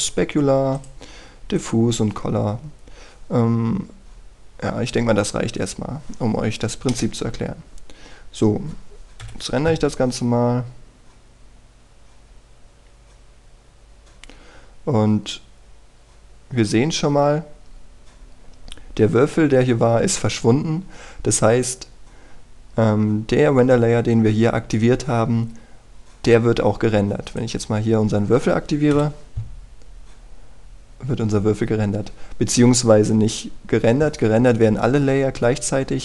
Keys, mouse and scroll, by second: 6.6-7.3 scroll down 1, 7.9 KP_0, 10.2 F12, 21.6-22.7 scroll up 1, 28.2 click, 29.9 F12.